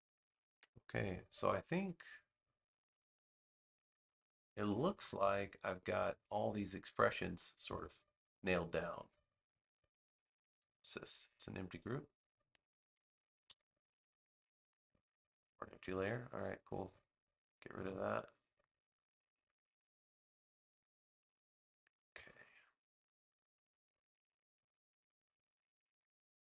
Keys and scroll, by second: 13.4 super+0.